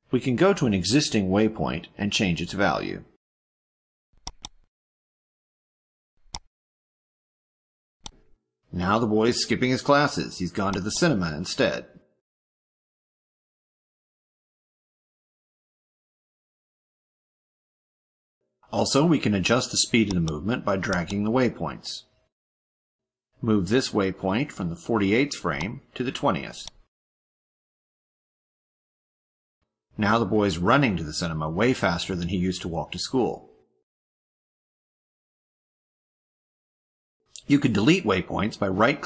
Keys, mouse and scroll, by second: 4.1 click, 6.5-8.0 drag, 10.6 click, 16.6 click, 17.6 click, 20.1 click, 20.9 click, 25.6-26.7 drag, 28.3 click, 28.8 click, 29.3 click, 29.9 click, 30.8 click, 37.2 click.